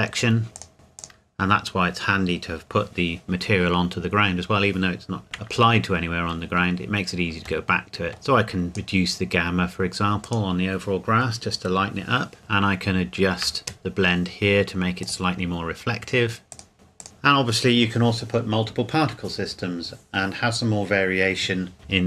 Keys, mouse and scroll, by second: 0.5 click, 7.6 click, 7.9 shift+middle click, 8.7 click, 10.8 click, 12.4 shift+middle click, 15.0 click, 17.0 click.